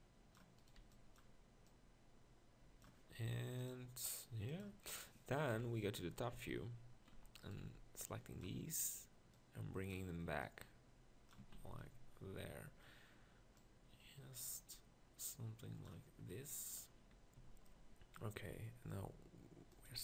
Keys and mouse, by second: 0.8 b, 5.5 KP_7, 6.3 z, 7.1 z, 7.6 b, 9.4 click, 11.4 Tab, 11.5 z, 16.3-17.4 middle drag, 17.4 z.